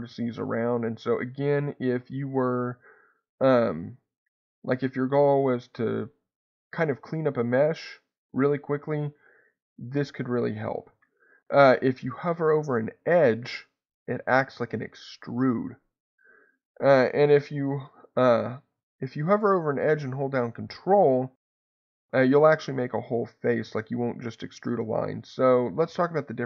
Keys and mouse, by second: 10.9 Escape, 13.4-17.3 drag.